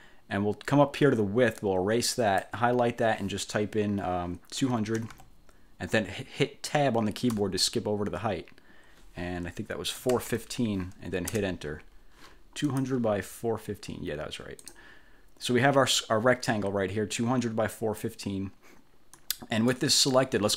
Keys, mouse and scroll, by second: 1.7-2.7 drag, 4.9 2, 5.1 0, 7.5 Tab, 9.9-11.0 typing, 11.5 Return, 12.8 click, 14.7 click, 15.6-18.3 drag, 19.3 click.